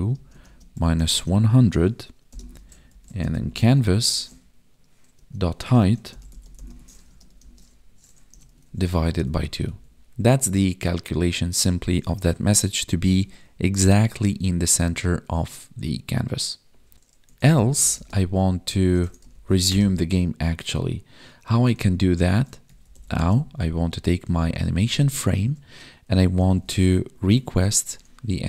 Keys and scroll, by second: 0.1 space, 0.4 space, 2.3 space, 7.0 space, 7.4 space, 8.6 ctrl+s, 9.0 Escape, 9.6 Right, 17.9 space, 24.2 Tab, 24.8 space, 25.2 space.